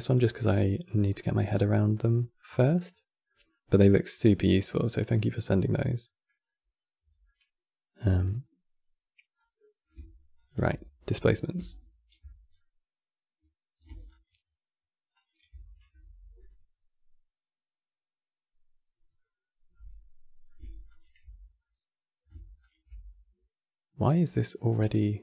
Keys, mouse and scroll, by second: 0.9-2.6 middle drag, 2.6-3.0 scroll up 4, 3.0-6.1 middle drag, 6.1-6.8 scroll up 2, 6.9-9.0 middle drag, 9.0 scroll down 4, 9.3-10.1 middle drag, 10.1 ctrl+shift+click, 10.9-13.8 middle drag, 13.8 ctrl+shift+click, 14.8 ctrl+shift+click, 19.4-20.6 middle drag, 20.6 ctrl+shift+click, 21.3-22.3 middle drag, 22.3 ctrl+shift+click, 23.8-25.2 drag.